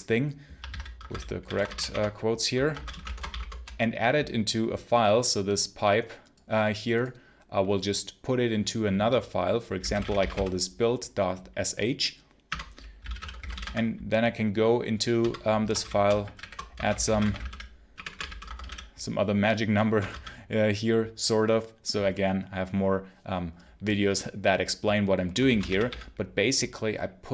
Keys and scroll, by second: 0.0-3.3 typing, 0.6 ctrl+c, 9.4-10.7 typing, 12.4 Return, 12.6-13.9 typing, 15.1 Return, 15.4-20.0 typing, 19.9 Return, 25.1-26.3 typing.